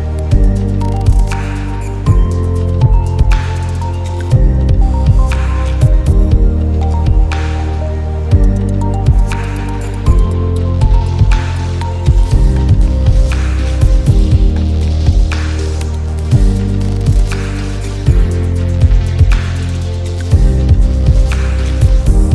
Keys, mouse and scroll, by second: 0.7-1.9 alt+scroll up 4, 2.4 click, 2.6 space, 2.6 click, 2.7 space, 3.1-8.6 drag, 8.6 space, 8.7 click, 8.7 space, 9.3 click, 17.9 shift+click, 19.1 click, 20.0 click.